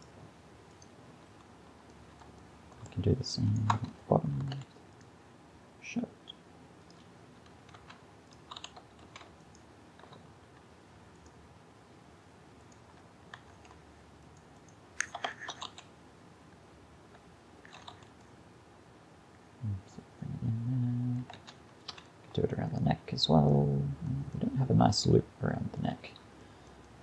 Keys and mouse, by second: 0.0-1.6 right drag, 1.3 a, 3.5 right click, 3.8 Tab, 4.6 ctrl+r, 7.9 ctrl+Tab, 8.6 a, 9.1 a, 13.4 Tab, 15.4 shift+Left, 15.7 alt+a, 17.7 alt+a, 21.4 Tab, 21.9 a, 25.5-27.0 middle drag.